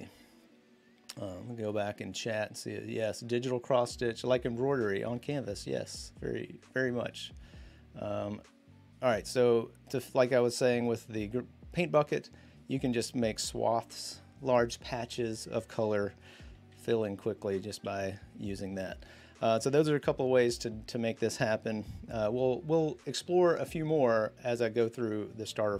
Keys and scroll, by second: 8.9 b, 16.5 g.